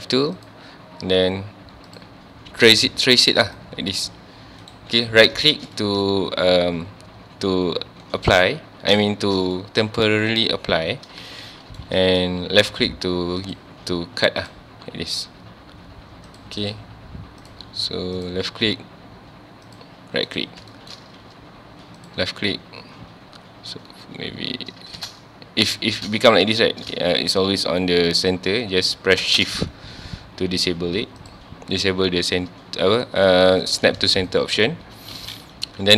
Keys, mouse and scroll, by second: 5.5 scroll down 1, 5.8-8.0 shift+middle drag, 8.0 scroll up 1, 9.1-11.1 shift+middle drag, 11.1 scroll down 1, 11.5-14.5 shift+middle drag, 20.7-23.8 shift+middle drag.